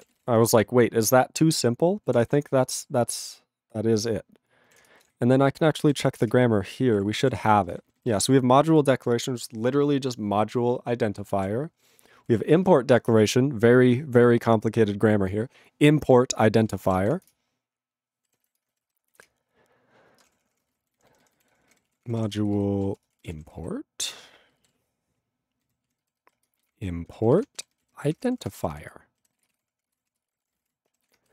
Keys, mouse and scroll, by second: 0.0 ctrl+e, 0.0 ctrl+n, 0.2 ctrl+g, 0.6 ctrl+s, 4.9 ctrl+Return, 6.5 ctrl+Return, 7.0 ctrl+=, 7.5 ctrl+n, 8.1 ctrl+space, 11.4 ctrl+g, 12.3 ctrl+a, 12.3 ctrl+n, 12.5 ctrl+space, 12.6 ctrl+e, 16.7 ctrl+g, 17.4 ctrl+Return, 18.6 Return, 19.3 ctrl+Return, 20.2 ctrl+space, 20.3 ctrl+a, 20.4 ctrl+p, 20.9 alt+w, 21.0 ctrl+n, 21.5 ctrl+o, 21.7 ctrl+y, 21.9 ctrl+e, 21.9 ctrl+p, 22.5 alt+f, 22.9-24.0 typing, 24.7 alt+b, 25.6 ctrl+n, 25.9 ctrl+e, 26.0 ctrl+b, 26.4 ctrl+BackSpace, 26.4-27.7 typing, 27.7 ctrl+n, 27.8 ctrl+e, 27.9 ctrl+n, 28.1 ctrl+space, 28.1 ctrl+a, 28.3 ctrl+p, 28.5 ctrl+g, 28.5 ctrl+e, 28.6 ctrl+n, 29.4 ctrl+s, 29.5 ctrl+space, 29.5 ctrl+a, 29.6 ctrl+p, 29.9 ctrl+g, 30.1 ctrl+a, 30.2 ctrl+space, 30.3 ctrl+e, 30.3 ctrl+n, 30.4 ctrl+e, 30.5 ctrl+n, 30.6 ctrl+e, 30.6 ctrl+g, 31.1 ctrl+s.